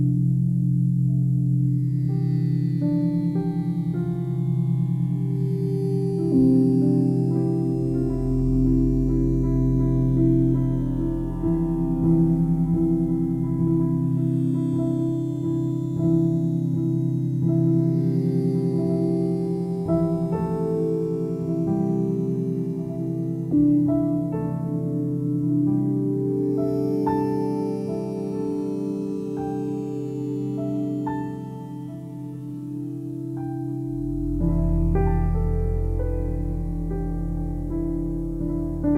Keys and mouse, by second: 0.7-3.9 alt+drag, 4.4-5.5 drag, 6.0-9.1 alt+shift+drag, 16.6-22.3 alt+drag, 23.3 click, 24.0 ctrl+alt+click, 24.6 ctrl+alt+click, 25.3 alt+click, 26.8 1, 27.3 alt+shift+click, 28.7 click, 29.5-35.1 drag, 36.0 click, 37.1 typing, 37.7 alt+shift+click, 38.5 ctrl+alt+click.